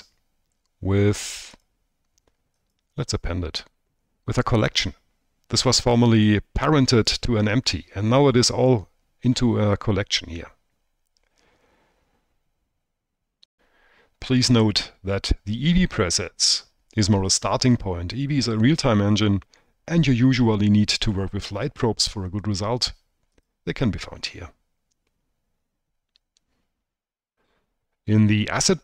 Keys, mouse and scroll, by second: 4.0 click, 5.9 click, 24.7-27.8 drag.